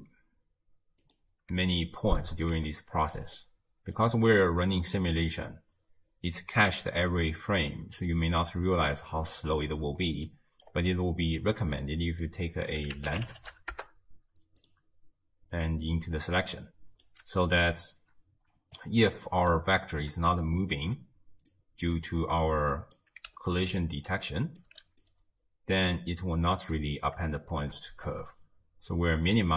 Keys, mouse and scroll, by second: 2.0 shift+right click, 2.6 g, 4.0-5.0 middle drag, 5.0 click, 10.3 middle click, 10.7-11.8 scroll up 1, 11.8 drag, 15.7 click, 18.8-19.3 scroll up 2, 19.3-22.3 middle drag, 22.3-22.8 scroll down 1, 22.8-23.3 middle drag, 23.3 d, 23.5 click, 24.1 d, 24.2 d, 24.3 right click, 24.6 d, 25.0-27.9 middle drag, 27.9 shift+space.